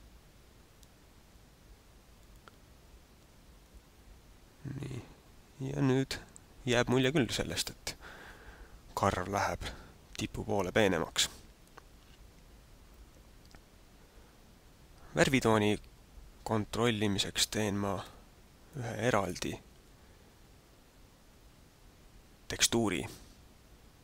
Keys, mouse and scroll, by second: 18.0 Escape, 18.7 click, 19.7 alt+a.